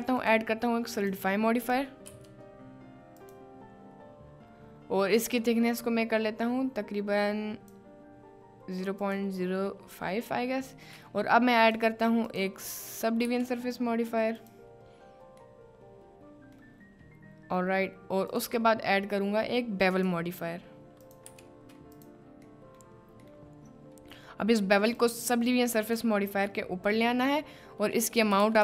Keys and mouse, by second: 1.1-3.4 drag, 5.3-7.8 drag, 9.0 click, 11.7-14.5 drag, 15.6-16.5 middle drag, 18.3 drag, 19.9-22.2 drag, 22.6 middle click, 25.0-26.1 drag, 28.1-28.6 drag.